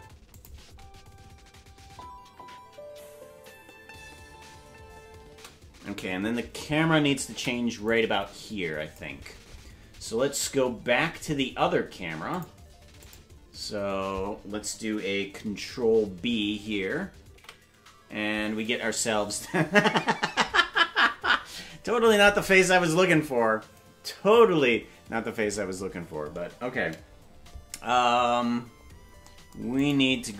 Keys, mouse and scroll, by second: 0.0 space, 0.3 click, 0.6 space, 5.5 space, 7.9 click, 7.9 space, 11.0-12.2 scroll up 16, 12.2 scroll up 1, 12.3 click, 13.0 click, 17.4 ctrl+b, 28.8-29.8 scroll up 5, 29.8 right click.